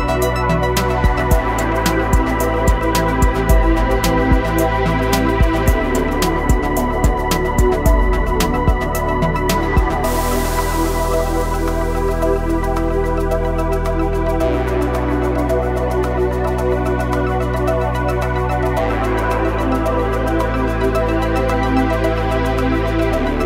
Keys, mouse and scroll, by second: 1.3 [, 1.4 [, 1.6 click, 3.9 ], 4.0 ], 4.2 click, 5.8 typing, 6.1 click, 8.0 typing, 8.4-9.8 drag, 9.8 typing, 10.1 click, 11.3 typing, 11.7-14.2 drag, 14.4 typing, 14.8 scroll up 1, 15.2 click, 20.3-20.7 typing, 23.2 typing.